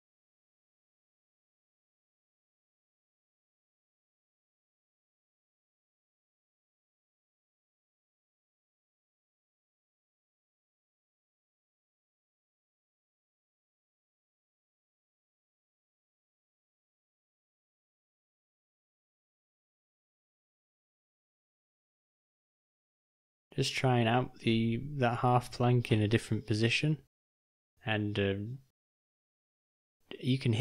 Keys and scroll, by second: 2.1 r, 6.1 g, 7.4 g, 10.2 g, 11.4 r, 17.0 r, 18.8 r, 23.9 g, 27.4 r, 29.6 r.